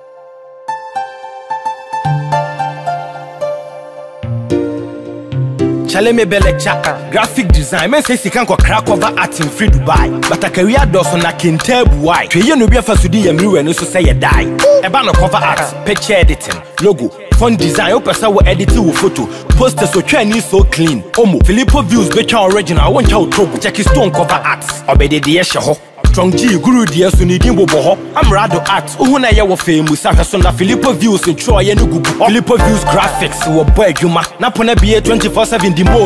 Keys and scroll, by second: 5.3 Up.